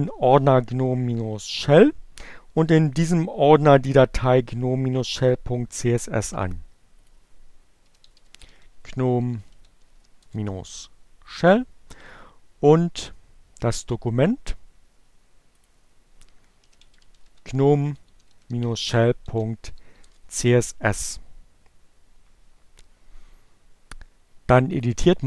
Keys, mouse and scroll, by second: 5.4 right click, 6.6 click, 7.0-9.8 typing, 10.1 click, 11.2 right click, 14.8 click, 15.6-18.9 typing, 19.2 Return, 23.5-24.6 drag.